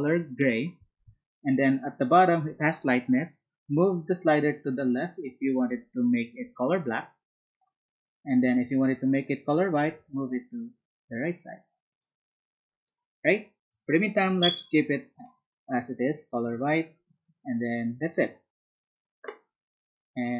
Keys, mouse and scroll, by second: 4.1-7.5 ctrl+drag, 8.6-12.2 ctrl+drag.